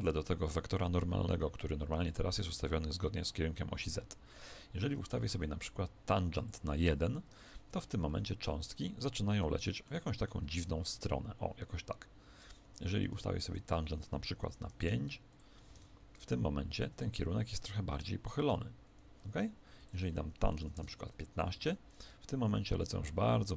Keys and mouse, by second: 6.3 click, 8.1 alt+a, 9.0-11.9 middle drag, 10.4 KP_1, 12.9 Escape, 13.4 click, 15.7 alt+a, 18.9 Escape, 19.7 click, 21.6 alt+a.